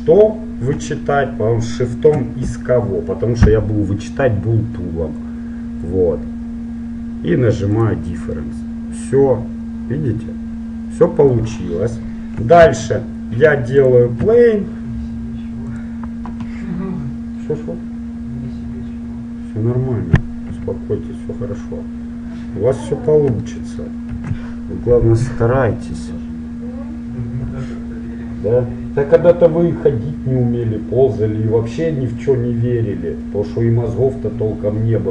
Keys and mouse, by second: 1.2 right click, 1.7-3.6 right drag, 5.3-6.3 middle drag, 6.3 click, 7.8-9.6 drag, 8.6-10.3 middle drag, 12.7 shift+a, 14.4 s, 20.7 KP_1, 24.3 shift+a.